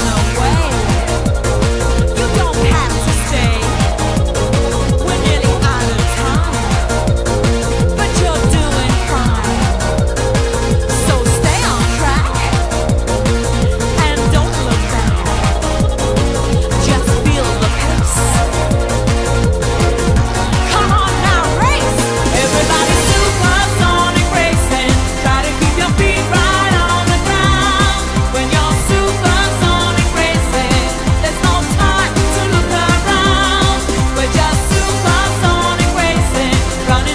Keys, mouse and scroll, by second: 0.3 shift+middle click, 0.8 middle click, 2.3 right click, 3.7 shift+d, 5.7 g, 7.8 r, 17.1 right click, 17.6 click, 17.7 click, 27.3 click, 28.2 e, 31.3 click, 36.0 click.